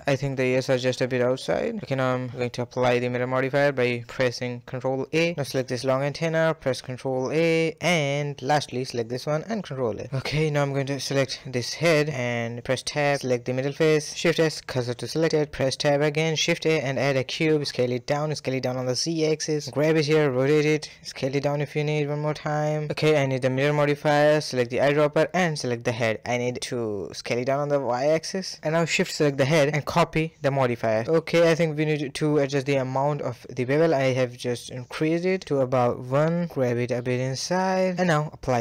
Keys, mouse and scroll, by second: 0.8 g, 1.1 scroll down 1, 1.4-3.1 middle drag, 3.1 ctrl+a, 3.2-4.7 middle drag, 4.9 click, 7.5 ctrl+a, 8.3 click, 9.3 ctrl+a, 10.1-11.4 middle drag, 11.4 a, 11.6 a, 11.6 scroll down 1, 11.7 middle click, 11.9 Tab, 12.6 Tab, 12.8 click, 13.1 Tab, 13.2 click, 13.6 shift+s, 15.7 Tab, 16.1 shift+a, 17.6-20.1 typing, 18.2 scroll up 3, 21.4 g, 22.9 click, 24.4 click, 25.4-26.6 middle drag, 26.6 s, 28.6 shift+click, 29.9-32.1 drag, 32.4 middle click, 32.9 scroll up 2, 33.2-34.4 middle drag, 34.4-35.1 scroll down 1, 35.1-35.6 shift+drag, 35.6 g, 38.0 ctrl+a.